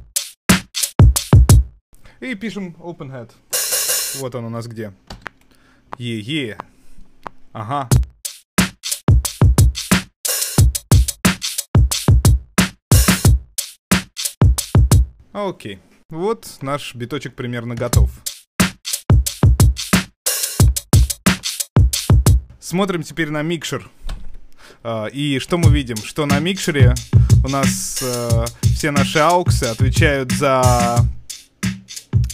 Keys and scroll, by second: 24.1 super+2.